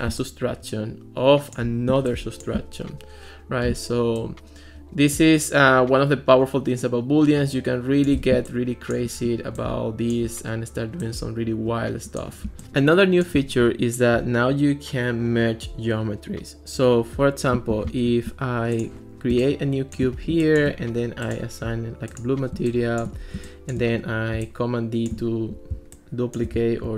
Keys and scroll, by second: 17.7 alt+r, 20.3 space, 22.6 space, 23.4 space.